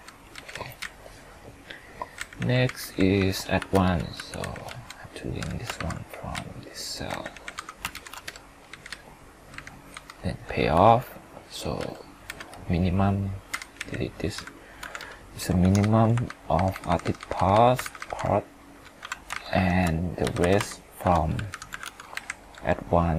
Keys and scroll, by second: 5.8 ctrl+Page_Up, 8.0 ctrl+shift+Down, 16.3 ctrl+Up, 20.2 F4.